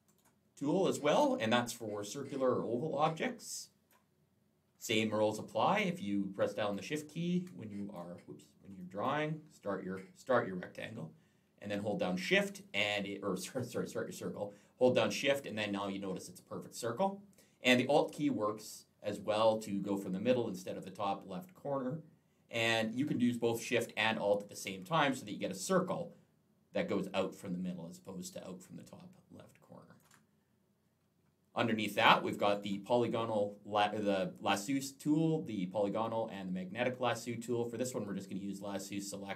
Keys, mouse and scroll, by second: 0.0 right click, 1.0 click, 1.6 click, 6.5 shift+click, 8.6 click, 9.4 click, 31.8 click, 32.3 right click.